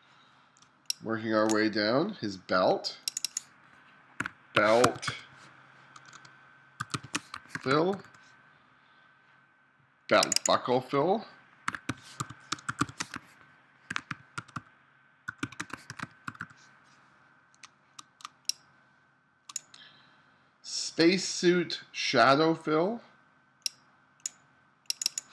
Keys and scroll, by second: 0.7 space, 4.2-8.0 typing, 11.7-16.3 typing, 17.7 space, 18.3 space.